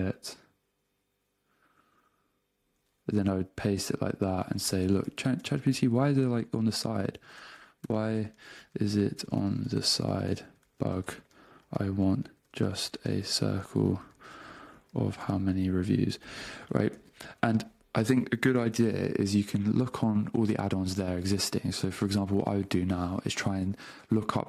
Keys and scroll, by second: 3.5 shift+super+3, 4.6 super+space, 5.3 Return, 7.5 y, 7.8 BackSpace, 8.4 space, 9.7-13.1 typing, 14.7 space, 15.5 space, 17.4 Return.